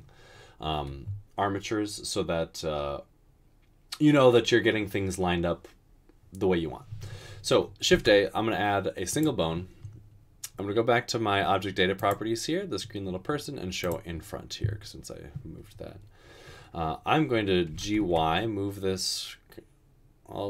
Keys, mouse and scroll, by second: 8.1 a, 17.8 typing.